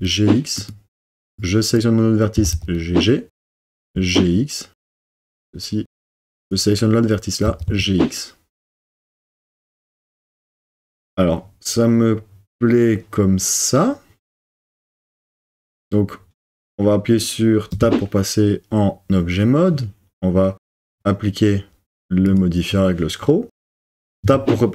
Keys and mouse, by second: 2.3 g, 2.6 g, 3.5 click, 3.8 g, 3.9 x, 5.3 click, 7.4 g, 7.7 x, 9.5 click, 17.7 Tab, 20.9-22.4 drag, 24.2 Tab.